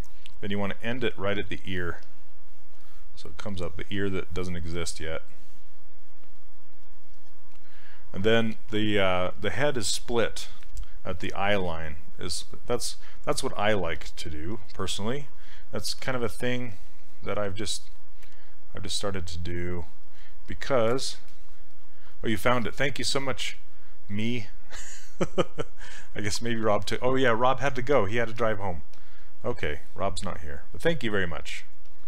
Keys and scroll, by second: 16.7 s.